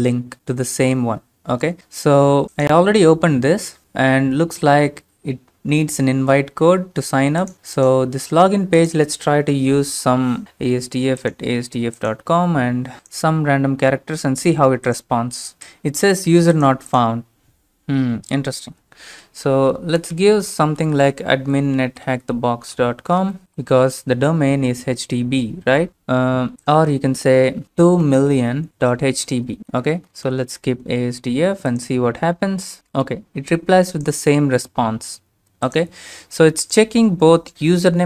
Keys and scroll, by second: 19.9-23.5 typing, 27.6-30.9 typing, 29.4 Right, 29.6 Right, 29.6 Delete, 29.6 Tab.